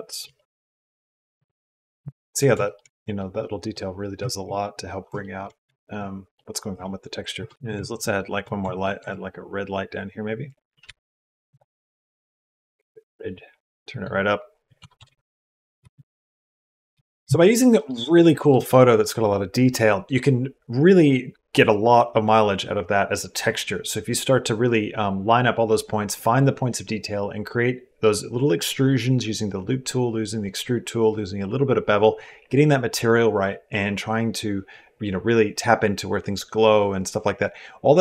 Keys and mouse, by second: 0.0 ctrl+r, 1.8 Tab, 2.4 shift+middle click, 3.0 middle click, 4.0 shift+middle click, 5.0 shift+middle click, 5.5 shift+middle click, 6.2 middle click, 6.5 Tab, 7.2 Tab, 7.4 click, 7.8 shift+middle click, 8.5 shift+middle click, 8.8 shift+a, 10.7 g, 11.7 click, 13.8-14.9 drag, 15.6 g, 16.4 click, 16.7 g.